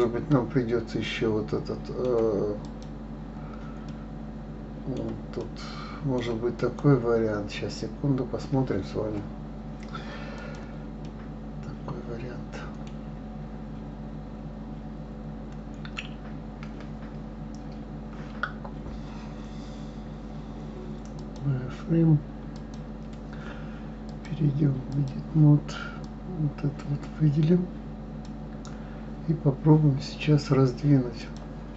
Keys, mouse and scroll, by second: 2.6 click, 3.8-6.5 middle drag, 6.5 click, 10.3 click, 11.0-14.0 middle drag, 21.1 click, 22.5 click, 24.1-26.5 drag, 31.2 click.